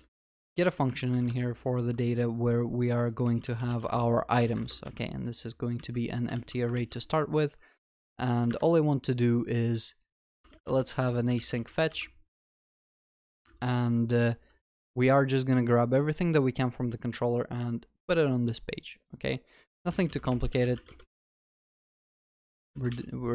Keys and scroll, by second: 6.3 ctrl+alt+shift+l, 6.8 ctrl+s.